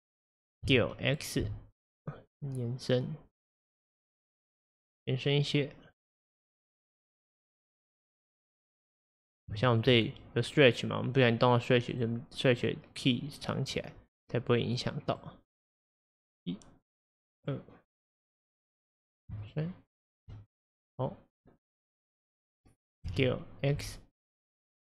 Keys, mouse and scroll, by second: 0.7 s, 6.0 click, 6.8 click, 8.1 click, 9.0 click, 9.6-12.0 shift+middle drag, 12.0 click, 12.6 click, 13.1 click, 13.8 click, 15.0 click, 16.3 click, 17.4 click, 19.5 shift+click, 20.0 shift+click, 21.1-23.1 drag, 23.1 s.